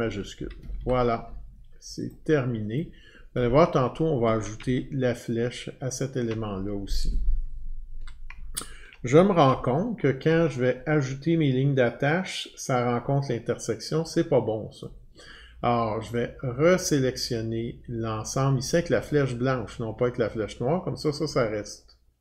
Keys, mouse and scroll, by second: 0.3 Escape, 0.6 Escape, 0.8 Escape, 2.1 click, 2.7 click, 4.7-5.8 alt+scroll, 8.5 ctrl+scroll, 9.6-10.1 alt+scroll, 14.8 click, 16.3 click, 17.3 click.